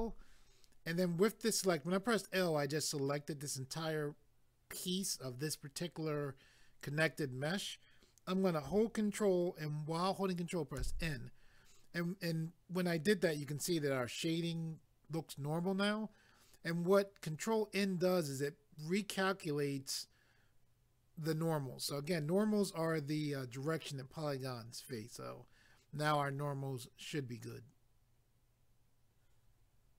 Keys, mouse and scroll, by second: 10.8 ctrl+n.